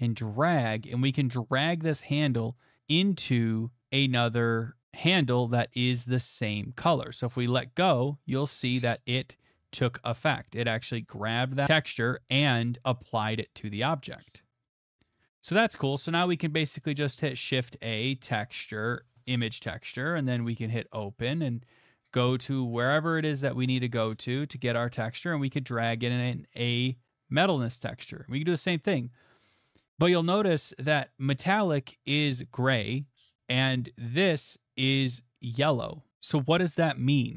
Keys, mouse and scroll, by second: 7.5 click, 7.6 right click, 9.3 middle click, 9.8 shift+middle click, 10.2 middle click, 10.5 middle click, 10.8 shift+middle click, 11.2 shift+middle click, 11.6 middle click, 11.8 middle click, 11.9 middle click, 14.6 click, 15.3 middle click, 15.5 middle click, 16.2 middle click, 17.2 a, 18.4 click, 19.5 click, 20.2 click, 22.9 click, 24.1 click, 24.2 click, 25.8 click, 25.9 click, 34.2 click.